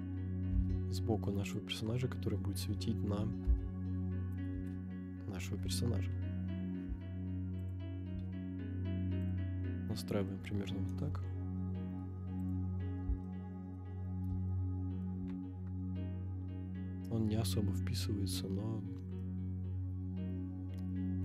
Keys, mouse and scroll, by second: 0.4 g, 0.5 z, 1.6 click, 1.8-2.3 middle drag, 3.2 r, 3.4 x, 3.8 9, 3.9 0, 4.6 Return, 5.5 KP_7, 6.4 scroll down 1, 6.8 g, 7.7 click, 8.1 r, 9.3 click, 9.7-10.3 middle drag, 10.3 scroll down 1, 10.4-10.9 scroll up 1, 10.9 KP_0, 12.4 click, 12.8 scroll down 1, 13.2-13.7 shift+middle drag, 13.9-14.5 scroll up 3, 14.5-15.0 shift+middle drag, 15.4 scroll up 2, 17.3 scroll down 1, 18.3-19.2 scroll down 4, 19.2-21.2 middle drag.